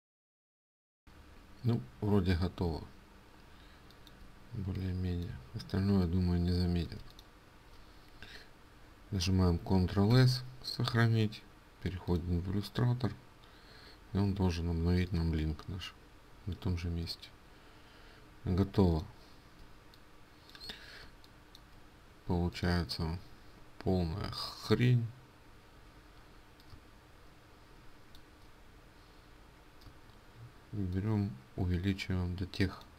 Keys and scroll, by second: 6.6 ctrl+space, 9.9 ctrl+s, 18.4 ctrl+space.